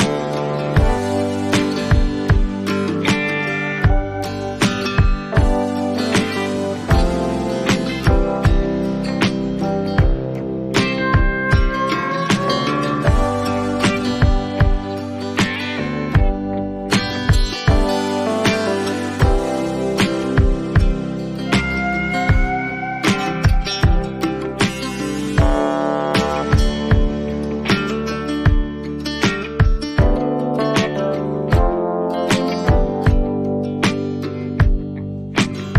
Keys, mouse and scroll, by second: 3.6 click, 5.7 click, 8.1 click, 10.0 click, 10.8-11.6 alt+scroll, 11.6 alt+scroll, 12.3 click, 13.9 click, 14.2 click, 14.8 click, 16.0 click, 17.9 ctrl+j, 18.8-19.5 scroll down 1, 19.5 scroll down 1, 21.3 click, 23.8 click, 23.8-25.5 alt+scroll up 6, 26.3 alt+scroll, 26.5 click, 30.3 click, 31.0-32.2 scroll down 7, 32.6-33.3 scroll, 35.3 click.